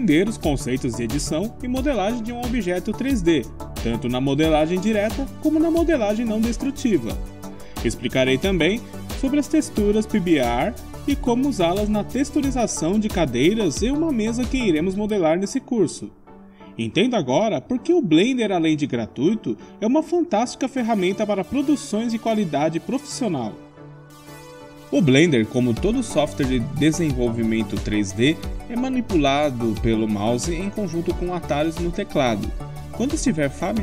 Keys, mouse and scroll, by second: 1.4 3, 1.4 KP_Decimal, 1.8-2.8 middle drag, 2.8-3.8 drag, 4.1 Tab, 4.1 KP_3, 4.3 click, 5.6 click, 6.9 middle click, 7.4 KP_0, 11.0-12.3 middle drag, 12.5 middle click, 15.5 middle click.